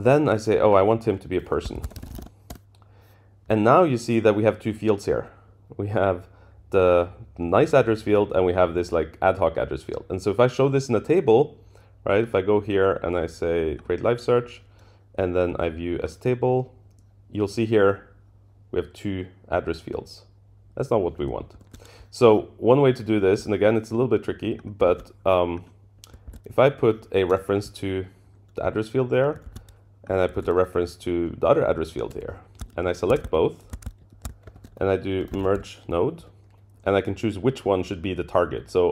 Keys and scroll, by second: 2.5 Return, 21.5 super+[, 24.9 super+c, 26.3 super+v, 27.3 Return, 29.4 super+c, 30.3 super+v, 31.6 Up, 32.7 shift+Down, 33.5 shift+Down, 34.1 shift+Down, 34.5 super+k, 36.2 Return.